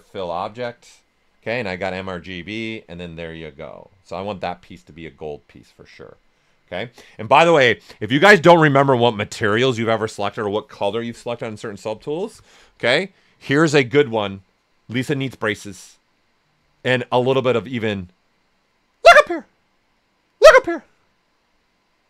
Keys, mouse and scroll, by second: 2.5 typing, 5.9 click, 5.9 typing, 17.1 typing.